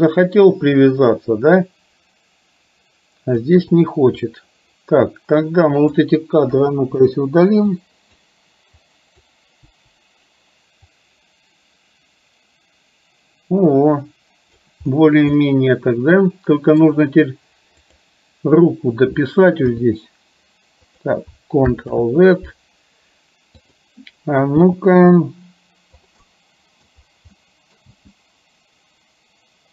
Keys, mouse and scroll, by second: 4.1-6.1 drag, 6.8 Delete, 7.6 click, 8.8 click, 9.8 Delete, 11.0-14.8 drag, 15.4-16.9 middle drag, 19.9 g, 22.0 ctrl+z, 23.8 click, 24.6 g, 26.3 scroll up 1, 26.4 middle click, 27.4 middle click, 28.4 g.